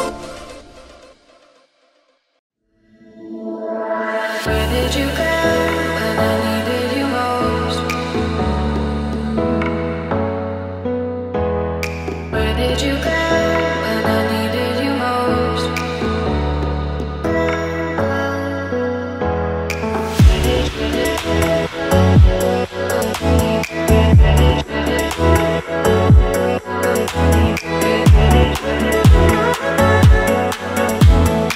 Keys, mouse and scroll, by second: 1.9 click, 3.1 Delete, 5.9 click, 7.0 click, 7.6-7.9 scroll down 1, 7.9-12.5 middle drag, 16.0 click, 16.6 click, 17.2 scroll up 1, 17.6-18.2 shift+middle drag, 18.7 Tab, 19.6 click, 21.1 shift+s, 23.7 KP_3, 24.3 scroll up 3, 24.7 shift+middle click, 26.0 Tab, 27.5 shift+a, 31.0-31.5 drag.